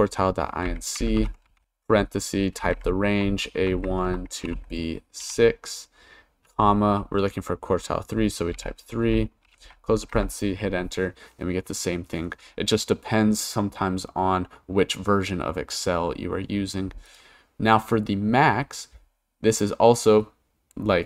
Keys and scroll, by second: 0.0-5.2 typing, 6.5 ,, 8.5 3, 9.4 shift+0, 10.1 Return.